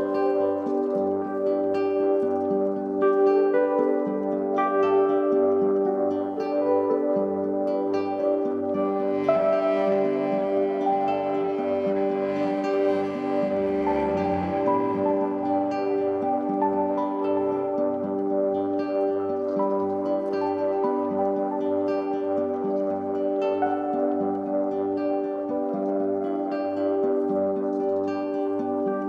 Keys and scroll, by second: 0.5 ctrl+t, 12.7 Return, 15.2 ctrl+d, 21.0 ctrl+c.